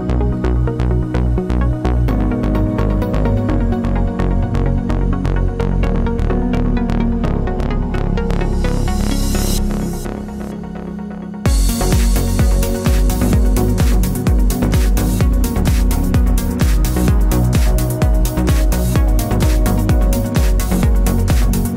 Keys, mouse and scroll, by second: 0.0 KP_Enter, 1.6 v, 1.9 Right, 2.3 Up, 3.1 Right, 4.0 Down, 4.3 Right, 5.3-5.7 typing, 6.4 click, 7.9 KP_Enter, 9.9 click, 14.0 ctrl+a, 14.5 KP_9, 14.6 KP_0, 14.9 Tab, 15.4 KP_0, 15.8 Tab, 16.5-18.5 typing, 17.6 Tab, 18.9 KP_Enter, 21.1 click.